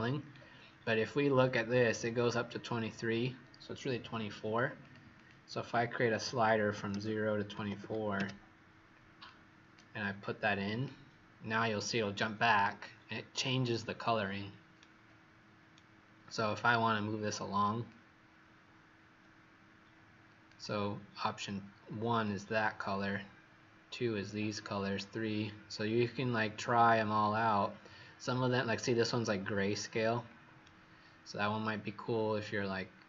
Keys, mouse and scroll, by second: 0.3 scroll up 1, 0.3-1.1 scroll down 2, 4.8 click, 5.1 click, 6.2 KP_0, 6.8 <, 7.5 KP_2, 7.8 KP_4, 9.2 click, 14.7 right click, 17.8 click, 30.6 right click.